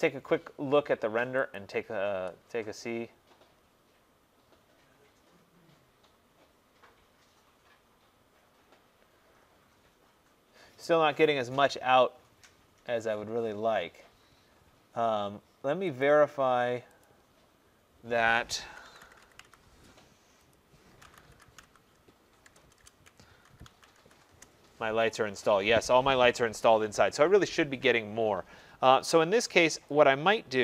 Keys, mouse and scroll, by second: 1.6 click, 16.1 click, 17.1 click, 18.8-19.4 typing, 20.6 click, 20.6-24.6 typing, 27.4 Escape.